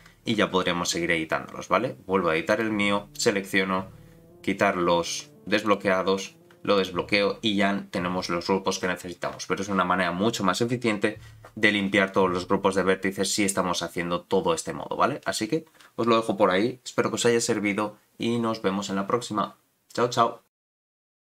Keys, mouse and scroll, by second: 2.5 click, 3.1-5.7 drag, 6.8 click.